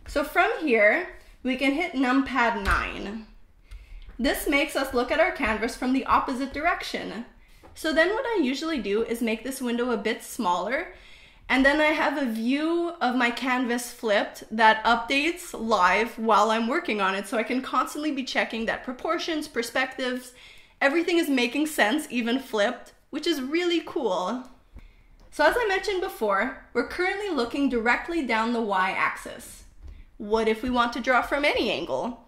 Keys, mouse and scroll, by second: 2.4 KP_9, 4.6-7.2 shift+middle drag, 9.1 click, 10.8 ctrl+middle click, 11.8 shift+middle click, 13.1 shift+middle click, 13.9 ctrl+middle click, 14.6 shift+middle click, 15.3 click, 16.0 click, 16.9 click, 17.7 click, 18.6 click, 19.7 click, 20.7 click, 21.9 click, 22.9 click, 23.8 click, 24.7 click, 25.5 click, 26.4 click, 26.9 click, 27.4 click, 31.8 shift+middle click, 32.1 ctrl+middle click.